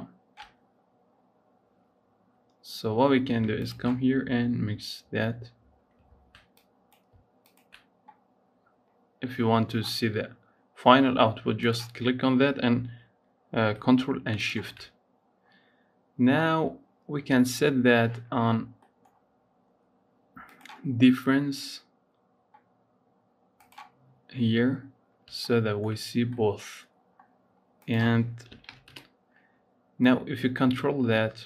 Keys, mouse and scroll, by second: 1.0-3.4 scroll up 2, 3.4 ctrl+shift+click, 4.1-6.3 scroll down 3, 6.3 click, 7.4 ctrl+shift+click, 9.2-9.7 scroll up 3, 9.7-11.5 scroll down 3, 11.5 click, 14.2 ctrl+shift+click, 15.3 scroll up 4, 16.2-19.2 scroll up 5, 20.2-23.3 drag, 24.8 scroll down 3, 25.2-27.0 shift+middle drag, 27.0-27.6 scroll up 2, 27.6-31.4 drag.